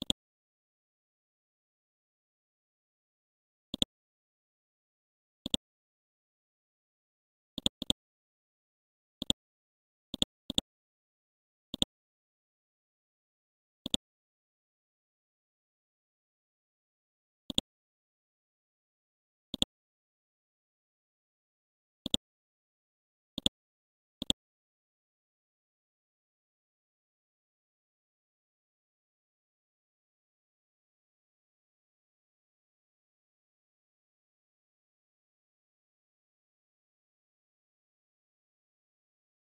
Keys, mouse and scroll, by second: 1.4 shift+Right, 1.8 shift+Right, 2.6 shift+Right, 3.8 click, 4.1 scroll down 1, 4.8-5.5 scroll up 1, 5.5 click, 5.8 scroll up 1, 6.1-7.0 scroll down 1, 7.0 scroll down 1, 7.6-8.9 drag, 9.6 scroll up 1, 10.2 click, 11.0 Down, 12.6 scroll down 1, 13.8 click, 14.8 KP_3, 16.2 scroll up 1, 17.5 click, 18.3 scroll down 1, 19.5 click, 20.4-22.0 scroll up 1, 22.0 click, 22.7 scroll up 1, 23.4 click, 25.1 KP_1, 30.1-31.2 typing, 32.4-34.1 typing, 36.1 End, 37.6-39.4 typing.